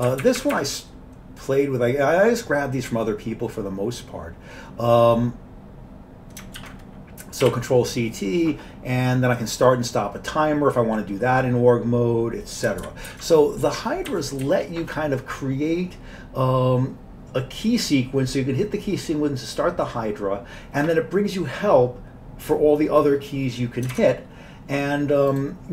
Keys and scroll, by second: 0.0 Up, 0.0 Down, 0.1 Up, 0.3 Up, 6.6 ctrl+c, 7.5 t, 12.8 ctrl+g, 13.1 ctrl+g, 14.1 Down, 14.5 Down, 14.6 Down, 23.9 alt+Tab.